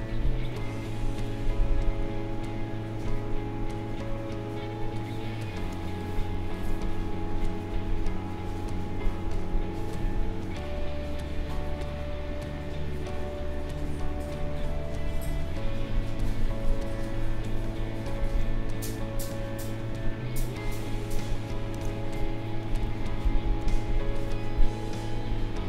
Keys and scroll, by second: 5.7 space, 16.7 space, 22.8 ctrl+z.